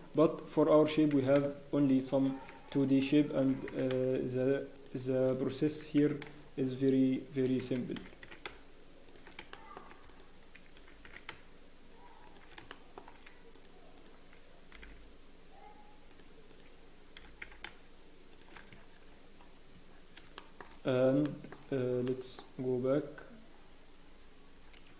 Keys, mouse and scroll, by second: 0.1 click, 0.8 g, 2.6 click, 3.4 g, 6.3 g, 8.5 g, 9.5 shift+middle click, 10.0 click, 10.8 g, 12.7 shift+middle click, 13.5 click, 14.7 g, 16.5 click, 17.1 g, 18.7 Tab, 18.7 scroll down 1, 19.7 Tab, 19.8 scroll down 14, 20.3 shift+middle click, 20.6-21.2 scroll up 3, 21.2 shift+middle click, 22.0 shift+middle click, 22.9 scroll up 3, 23.5 scroll down 1.